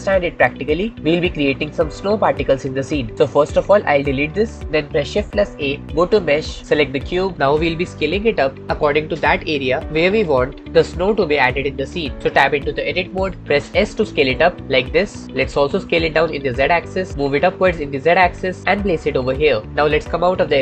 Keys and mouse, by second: 4.1 x, 13.1 Tab, 14.0 s, 15.7 s, 16.0 z, 17.1 g, 17.4 z, 19.4 click.